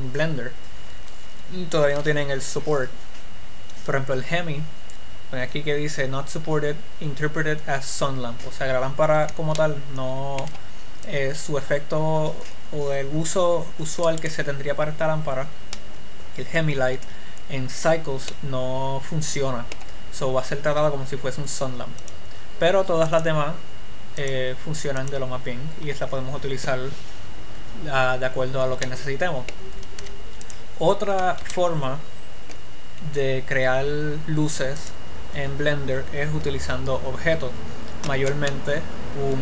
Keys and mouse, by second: 9.4-11.4 middle drag, 11.4-13.4 drag, 18.6-19.9 middle drag, 22.5-27.1 drag, 29.2 middle click, 30.4 x, 31.9 shift+a, 37.7-39.4 middle drag.